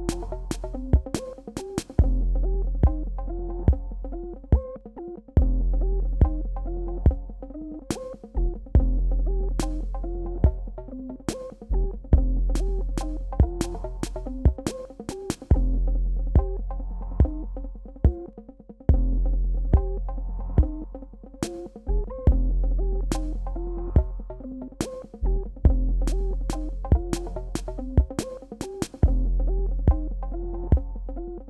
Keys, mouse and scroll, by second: 13.0 click, 14.4 ctrl+-, 20.1 click, 21.9 ctrl+Delete, 26.0 click, 27.4 t, 30.4 click.